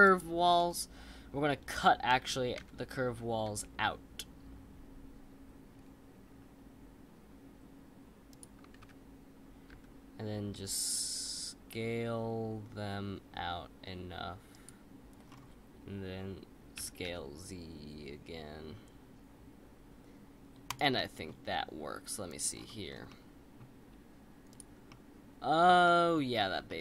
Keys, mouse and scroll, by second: 0.4-2.6 scroll down 5, 2.6 s, 8.7 ctrl+z, 9.7 s, 15.2-16.8 scroll up 4, 16.8 s, 20.9-22.3 middle drag, 22.3 click, 22.5-23.1 scroll down 7, 23.1-24.5 middle drag, 24.5 click, 24.9-26.3 middle drag, 26.3-26.6 scroll up 2, 26.6-26.8 shift+middle drag.